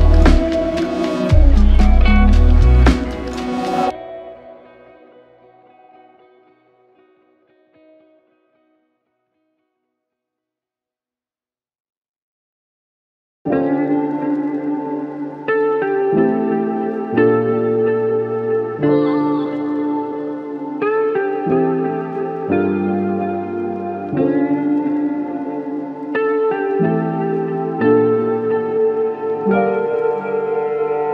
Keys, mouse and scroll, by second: 4.4 double click, 7.1 alt+click, 19.9 double click, 26.8 alt+click, 29.9 alt+shift+click.